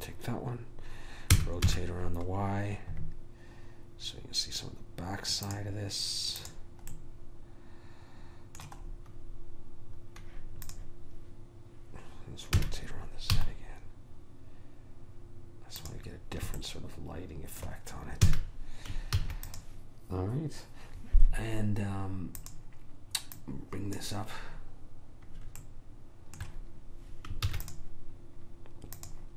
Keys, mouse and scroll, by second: 1.5 r, 6.5 click, 7.1 right click, 7.5-12.4 middle drag, 10.8 click, 12.8 r, 16.7-18.4 middle drag, 18.4 a, 19.3 ctrl+s, 22.6 click, 25.1-26.2 middle drag, 27.6 ctrl+s, 29.1 click.